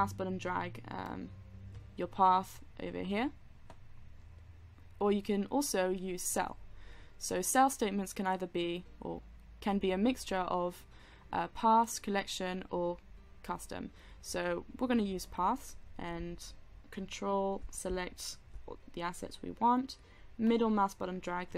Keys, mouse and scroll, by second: 20.9-21.5 middle drag.